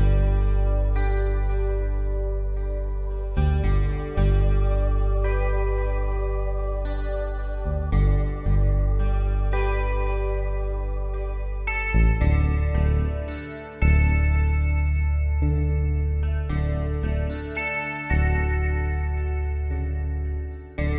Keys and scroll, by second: 15.0 F3.